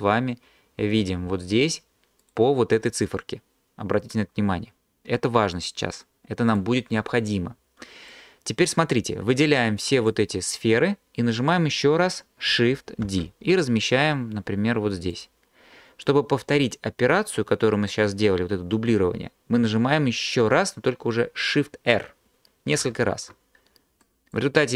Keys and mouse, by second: 5.5 click, 13.1 shift+d, 13.5 click, 15.1 click, 22.1 shift+r, 22.9 shift+r.